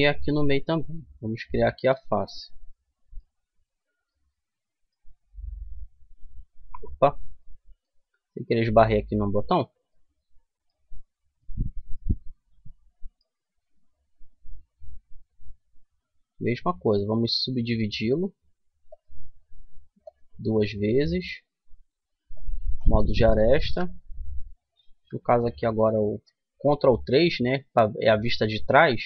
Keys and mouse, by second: 1.2 click, 2.9 f, 3.9 middle click, 6.1 middle click, 8.1 Tab, 9.2 Tab, 12.5-15.7 middle drag, 16.1 w, 18.7 w, 19.7-21.5 drag, 22.0-23.3 drag, 23.3 KP_3, 23.4 click, 23.7 click, 24.7 ctrl+KP_3.